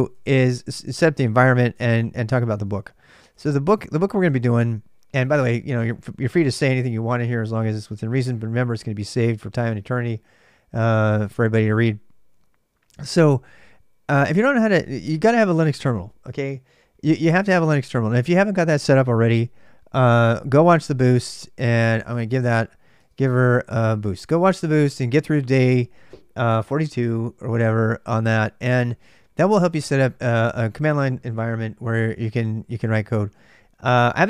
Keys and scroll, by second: 0.0-4.2 typing, 2.5 ctrl+c, 12.4-13.4 typing, 21.5-24.4 typing.